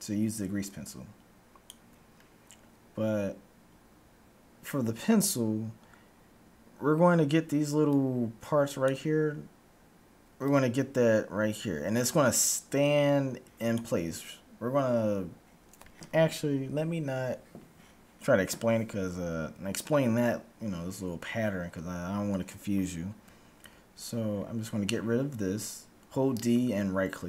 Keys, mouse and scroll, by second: 0.0-1.7 drag, 1.7 d, 2.0 d, 7.0-10.3 d, 7.8-9.7 drag, 10.7-12.0 drag, 10.7-15.3 d, 15.7 d, 23.2 d, 23.8-25.3 right drag.